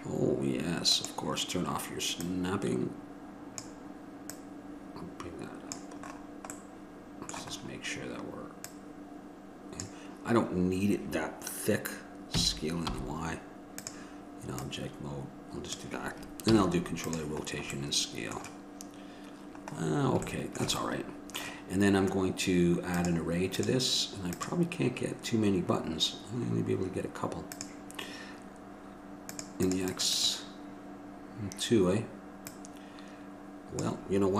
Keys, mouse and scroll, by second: 6.8-8.8 middle drag, 8.8-13.1 drag, 14.8-15.9 drag, 16.7 ctrl+a, 20.1 middle click, 24.6-34.3 drag.